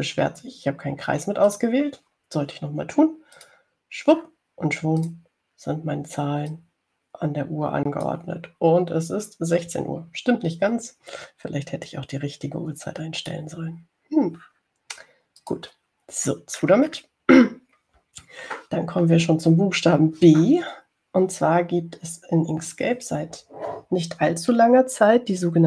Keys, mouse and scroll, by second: 0.5 click, 2.8 shift+click, 4.7 click, 6.3 click, 7.8-9.5 drag, 13.1-14.8 drag, 16.7 click, 17.5-18.4 scroll down 1, 19.1-19.4 scroll up 1.